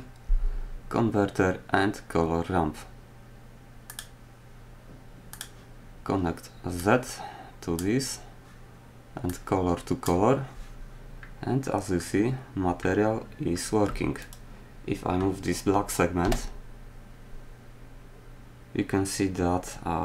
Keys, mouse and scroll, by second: 16.2 g.